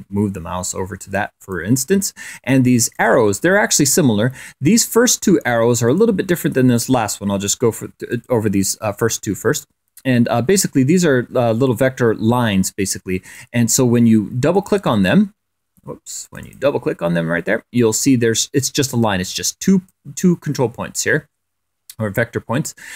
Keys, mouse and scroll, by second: 0.2 click, 1.2 click, 2.7 click, 3.7 click, 5.6 click, 6.7 click, 7.9 click, 11.4-13.3 drag, 14.3 click, 16.0 click, 17.5-18.7 drag.